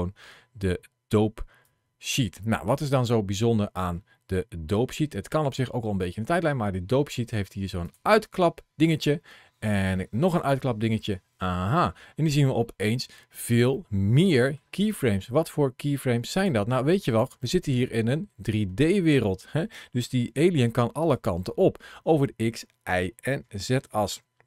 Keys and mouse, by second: 1.5-3.0 drag, 7.7 click, 10.1 click, 12.4 middle click, 13.6 middle click, 14.8 click, 16.2 click, 16.8 click, 17.2-19.5 middle drag, 20.1 g, 20.8 right click, 21.3-23.6 middle drag.